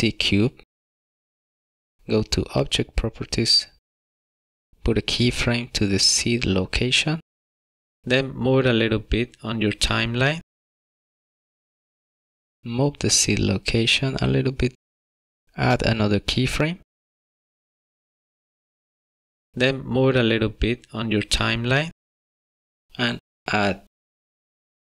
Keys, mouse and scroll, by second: 0.0 click, 3.6 click, 7.4 click, 9.9 click, 15.5 click, 19.5 click, 24.0 click.